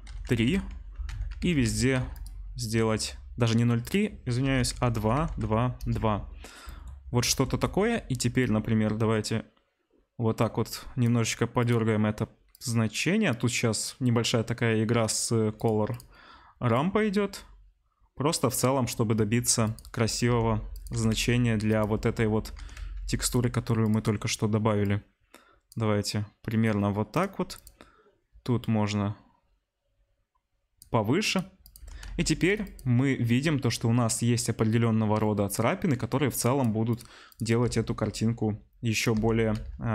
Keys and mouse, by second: 2.2-3.9 middle drag, 3.9-11.7 drag, 6.1 middle click, 11.2 middle drag, 11.7-15.5 middle drag, 15.5-16.0 drag, 16.0-20.7 middle drag, 19.6 click, 20.3 r, 20.7 click, 20.8-31.3 middle drag, 20.9 r, 22.5 r, 27.1-27.6 drag, 31.3 click, 31.3 middle click, 31.6 click, 31.7-36.7 middle drag, 31.8 r, 36.4-36.9 drag, 36.9 middle click, 37.2 click, 37.3-39.9 middle drag, 37.6 g, 39.1 r.